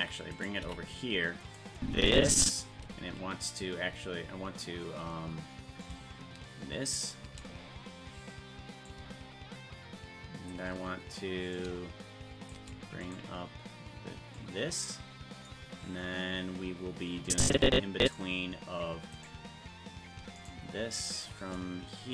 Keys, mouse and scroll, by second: 0.3 right click, 0.6 g, 1.8 click, 5.8-7.1 drag, 8.9-10.5 shift+drag, 11.5 click, 13.1 right click, 14.4-15.5 drag, 17.3 click, 19.2 right click, 20.4-21.5 shift+right drag.